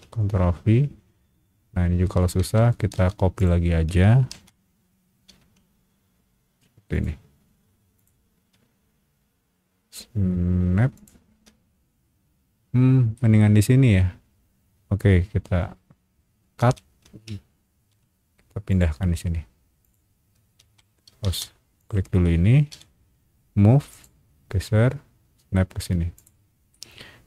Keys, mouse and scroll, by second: 2.4 Escape, 2.9 space, 3.4 click, 4.3 ctrl+c, 5.2 ctrl+v, 6.9 click, 7.9 click, 10.9 shift+click, 13.1 shift+middle click, 16.6 ctrl+x, 17.7 ctrl+v, 18.7 click, 19.8 click, 20.6 Escape, 21.2 space, 21.8 click, 22.7 m, 23.9 click, 26.1 shift+click, 26.7 middle click.